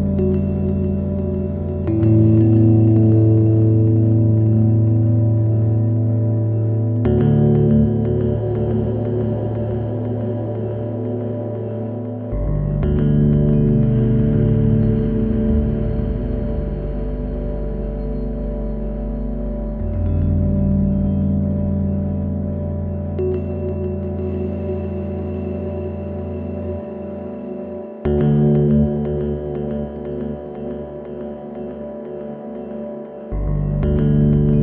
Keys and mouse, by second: 1.5-2.9 drag, 3.8-4.3 middle drag, 7.0 click, 8.3 shift+a, 16.8 click, 19.5 click, 20.1 click, 20.8 middle click, 21.1 middle click, 22.5-25.0 middle drag, 25.9-26.6 middle drag, 28.8-29.2 middle drag, 29.5 middle drag, 30.6-30.9 drag, 31.2 click.